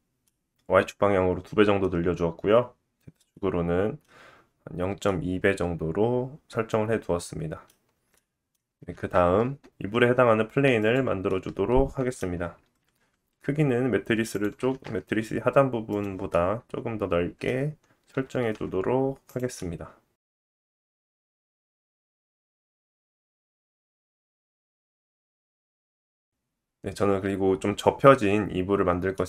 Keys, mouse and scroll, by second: 0.5-5.0 middle drag, 8.1 middle click, 8.8-16.4 shift+middle drag, 8.9 shift+a, 13.4 g, 18.6-19.9 drag, 18.6 s, 20.5 click, 20.5 g, 20.9 middle click, 21.4 s, 21.8 middle click, 22.1-22.4 scroll up 2, 22.4 scroll down 2, 23.2 s, 24.1 middle click, 29.1 middle click.